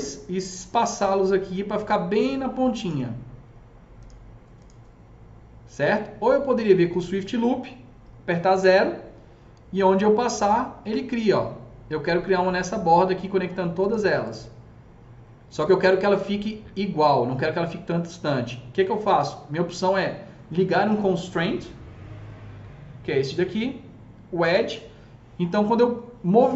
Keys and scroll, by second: 8.5 KP_0.